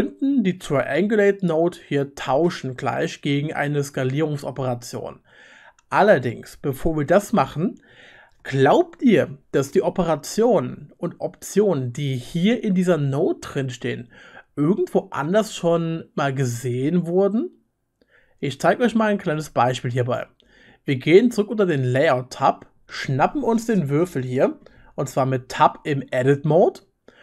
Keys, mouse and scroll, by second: 21.9 middle click, 22.9 right click, 22.9-23.3 middle drag, 23.1 right click, 23.3 right click, 23.3 middle click, 23.4-23.8 drag, 23.8 middle click, 23.8 right click, 23.9 click, 24.2 middle click, 24.2 right click, 24.4 middle click, 24.4 right click, 24.5 middle click, 24.5 right click, 25.0-27.2 drag, 25.5 Tab.